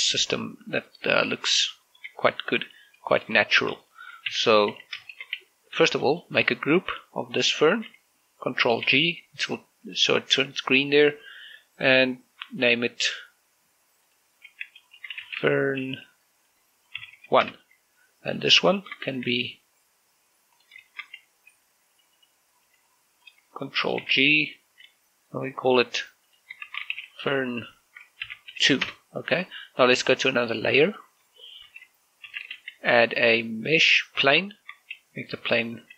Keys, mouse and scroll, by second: 2.9 shift+middle click, 3.1-4.1 scroll up 1, 4.2 shift+middle click, 5.1-7.1 typing, 5.9 shift+middle click, 6.8 middle click, 7.6-9.7 drag, 9.7 ctrl+g, 13.4 click, 15.7-16.6 typing, 17.7 shift+-, 17.9 1, 18.2 Return, 19.1 right click, 19.5 shift+middle click, 19.9 a, 21.3 click, 21.7 shift+middle click, 22.3 b, 22.7 right click, 23.4 b, 23.7 click, 24.8 ctrl+g, 27.1 click, 27.5-29.3 typing, 29.6 Return, 31.7 click, 32.3 shift+middle click, 33.1 shift+c, 33.5 shift+a, 34.9 click, 35.7 s.